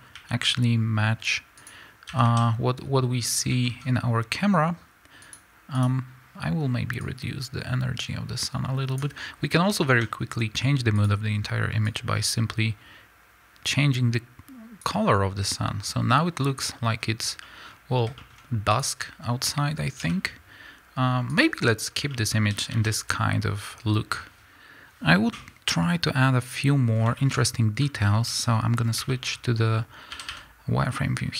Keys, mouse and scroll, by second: 0.1 r, 1.6 click, 2.1 a, 2.7-3.6 scroll down 2, 3.6-5.1 middle drag, 3.8-5.1 scroll up 2, 5.1 click, 5.6 click, 6.9-9.8 drag, 9.4-9.8 scroll down 2, 9.8-10.9 middle drag, 10.9 click, 16.9-17.3 scroll up 1, 17.3-18.6 middle drag, 18.3-18.6 scroll up 2, 18.6 click, 19.9 r, 21.3 click, 21.8 scroll down 2, 22.0-25.4 middle drag, 22.5 a, 24.4 KP_Enter, 25.4-28.2 drag, 28.2-31.3 middle drag, 28.2 z, 30.1 a.